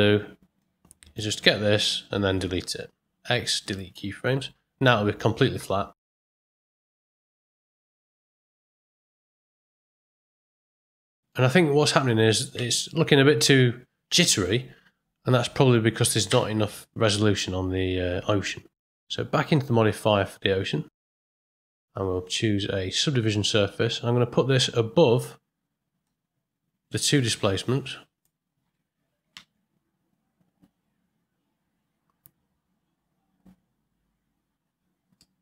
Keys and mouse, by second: 0.5 click, 2.6 x, 5.5 space, 9.2 space, 9.8 ctrl+click, 10.3 click, 10.8 ctrl+click, 12.5 space, 16.2 space, 19.5 click, 21.8-23.3 drag, 26.0-28.2 drag, 29.3 space, 35.2 middle click.